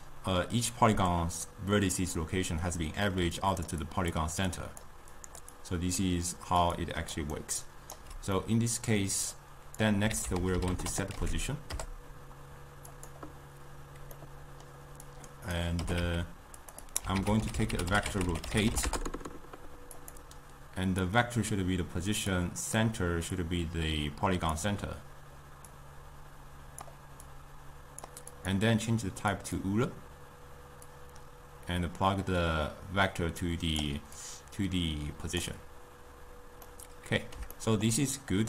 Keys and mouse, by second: 3.2-5.1 typing, 3.5 click, 4.1 drag, 4.6 click, 5.3 click, 6.2-6.8 d, 7.2 click, 7.5 right click, 8.3 d, 8.8 middle click, 9.7 click, 10.7 ctrl+a, 14.5 middle click, 15.2-16.5 drag, 16.5 g, 17.0 click, 17.2 ctrl+a, 21.4 click, 23.4-26.2 drag, 27.7 click, 28.5-33.8 drag, 34.3-36.9 drag, 36.9-38.4 middle drag.